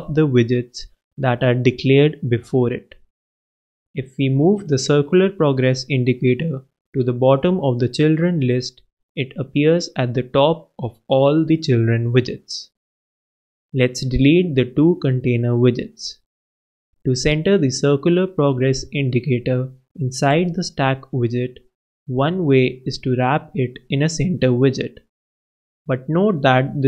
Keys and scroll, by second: 3.3 alt+Up, 3.5 alt+shift+Down, 4.2 alt+shift+super+Down, 4.7 alt+shift+super+s, 14.4 super+Up, 14.6 super+BackSpace, 15.3 super+s, 18.1 super+Left, 18.7 alt+super+Return, 19.4 alt+Return, 19.5 alt+Down, 21.6 super+s.